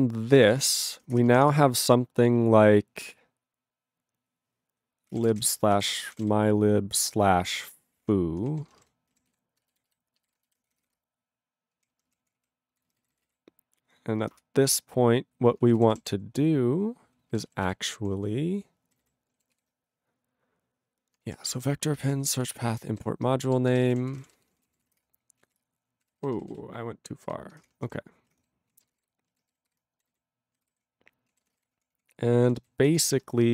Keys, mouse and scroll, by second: 0.3 ctrl+g, 0.4 ctrl+n, 0.5 ctrl+n, 0.8 ctrl+e, 1.3 Return, 1.5 ", 4.9-8.6 typing, 8.6 ctrl+a, 8.7 ctrl+space, 8.8 ctrl+g, 9.4 ctrl+s, 9.8 alt+b, 9.9 alt+b, 10.6 ctrl+b, 10.9 /, 10.9 space, 11.8 ctrl+p, 11.9 ctrl+p, 12.2 ctrl+p, 12.4 ctrl+p, 12.8 ctrl+n, 12.9 ctrl+n, 13.0 ctrl+n, 13.1 ctrl+e, 13.1 ctrl+n, 13.2 ctrl+e, 13.8 ctrl+n, 14.4 Return, 15.0 Return, 15.9 ctrl+=, 17.3 ctrl+g, 17.7 ctrl+s, 18.0 ctrl+p, 18.2 ctrl+p, 19.3 ctrl+n, 19.5 ctrl+s, 21.4 ctrl+p, 22.0 ctrl+p, 22.7 ctrl+alt+b, 22.9 ctrl+alt+b, 23.8 ctrl+r, 23.8 m, 25.0 Return, 25.5 ctrl+a, 26.0 ctrl+r, 26.4 ctrl+r, 26.5 ctrl+r, 27.3 ctrl+r, 27.7 Return, 28.0 ctrl+l, 28.4 ctrl+-, 28.7 ctrl+a, 28.9 ctrl+space, 29.0 ctrl+g, 30.0 ctrl+n, 30.1 ctrl+n, 30.7 ctrl+=, 31.2 ctrl+=, 31.3 ctrl+a, 31.4 ctrl+space, 31.5 ctrl+e, 31.6 ctrl+g, 31.8 ctrl+p, 32.0 ctrl+p, 32.8 ctrl+n, 33.0 ctrl+s.